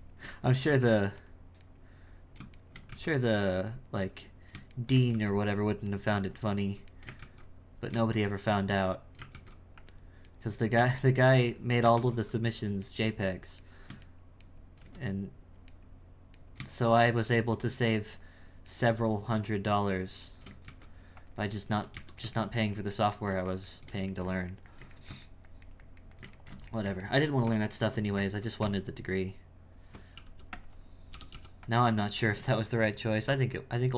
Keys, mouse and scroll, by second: 0.7 ctrl+x, 1.7 right click, 2.5 shift+right click, 2.9 ctrl+x, 4.0 right click, 4.7 shift+right click, 5.1 ctrl+x, 6.0 right click, 6.4 right click, 6.8 shift+right click, 7.2 ctrl+x, 8.3 shift+right click, 8.7 shift+right click, 9.3 ctrl+x, 10.3 right click, 11.0 shift+right click, 11.3 shift+right click, 11.9 ctrl+x, 12.9 right click, 13.6 right click, 14.1 shift+right click, 14.4 shift+right click, 15.7 right click, 16.3 right click, 16.8 shift+right click, 17.6 shift+right click, 18.2 shift+right click, 18.7 shift+right click, 19.4 shift+right click, 20.2 shift+right click, 20.6 ctrl+x, 21.9 a, 22.4-27.4 ctrl+middle drag, 27.4 Tab, 28.6 Tab, 32.0-33.1 drag, 33.8-33.9 drag.